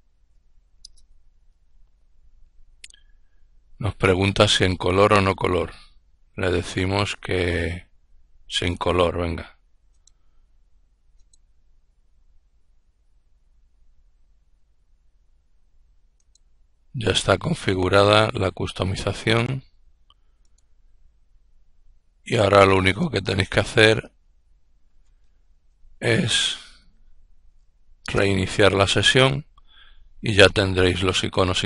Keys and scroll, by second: 0.2-1.2 typing, 25.2-27.2 typing, 27.5 Return.